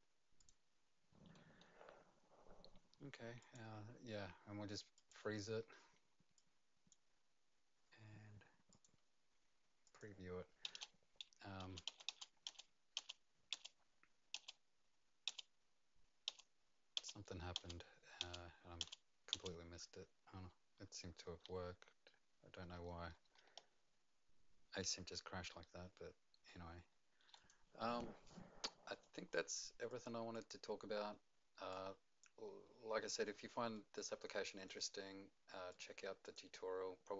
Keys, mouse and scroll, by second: 0.4 click, 3.4 click, 5.0 click, 6.3 click, 8.7 click, 9.8 click, 10.6-15.3 typing, 16.3-19.3 typing, 17.0 click, 21.2-27.2 typing, 22.2 click, 22.4 click, 22.6 click, 27.3 click, 29.3 click, 29.9 click, 30.3 click, 31.7 click, 33.7 right click, 35.7 click, 36.2 click.